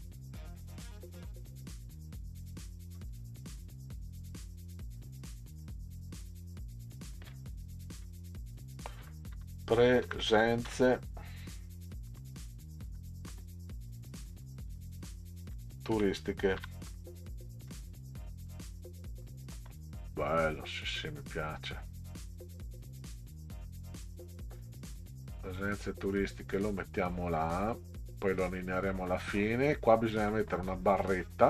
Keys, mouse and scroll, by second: 3.0 click, 3.2 click, 5.6 click, 9.0-10.8 typing, 12.1 z, 12.9 e, 13.3 space, 14.4-18.4 typing, 20.1 click, 21.8-26.8 drag, 29.1 middle drag.